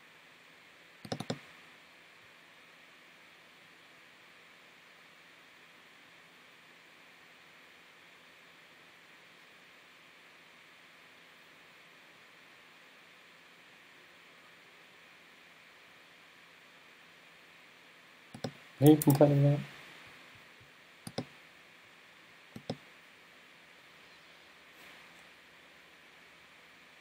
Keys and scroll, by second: 19.1 super+s.